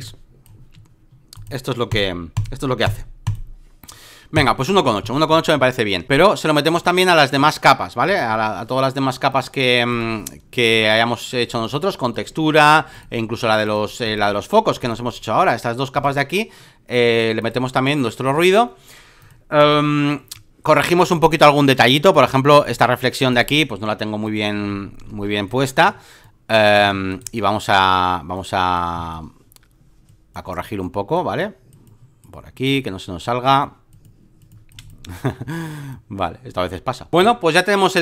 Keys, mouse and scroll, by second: 0.0 click, 1.3-4.6 drag, 6.7 space, 6.8 click, 8.0-14.6 drag, 14.8 ctrl+click, 15.9-20.7 drag, 21.0 ctrl+click, 22.1-24.5 drag, 24.6 alt+middle click, 24.8 alt+middle click, 25.0 alt+middle click, 25.3 space, 25.4 click, 26.2 click, 26.7 ctrl+z, 27.1 right click, 27.7-28.9 drag, 28.9 x, 29.1-34.8 drag, 34.8 space, 34.8 click, 35.9-38.0 drag.